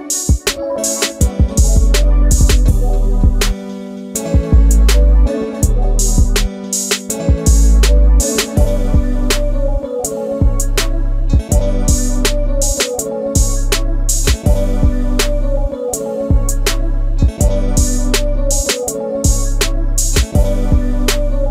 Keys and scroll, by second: 1.8 e, 3.9 typing, 9.8 space, 11.9 Delete, 12.3 Delete, 20.3 l.